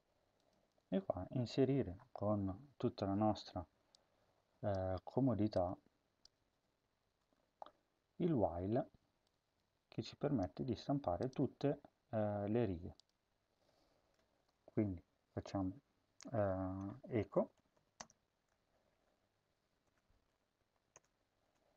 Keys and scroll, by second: 0.5 BackSpace, 0.9 BackSpace, 6.1 BackSpace, 6.5 BackSpace, 6.9 Return, 10.3 Tab, 10.7 Tab, 14.3 BackSpace, 16.9-19.9 typing, 20.3 Left, 20.5 Left, 20.9 Return, 21.3 Return.